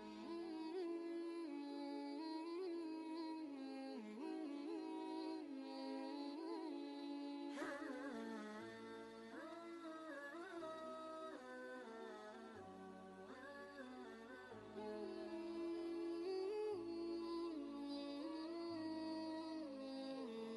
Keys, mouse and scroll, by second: 0.0-0.3 typing, 0.8 Return, 8.0 Return, 8.1 scroll down 1, 9.2-9.6 scroll up 2, 10.5 scroll down 1, 11.3 scroll up 1, 12.2 click, 12.8 scroll down 1, 15.0 right click, 16.4 click, 18.8 alt+Tab.